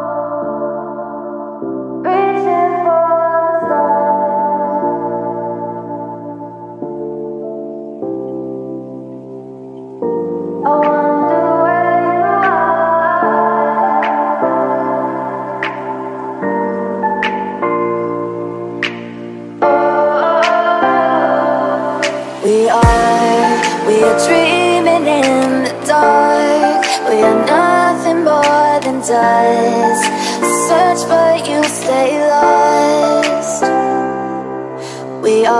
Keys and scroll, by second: 0.3-2.3 typing, 3.7 BackSpace, 4.1 1, 5.8 Return, 9.8 ctrl+u, 15.1 Escape, 15.8 ctrl+0, 16.3 ctrl+space, 17.5 space, 18.7 space, 18.9 b, 24.2 ctrl+z, 25.9 ctrl+z, 28.8 z, 29.4 space, 30.3 ctrl+space, 30.5 z, 35.0 z.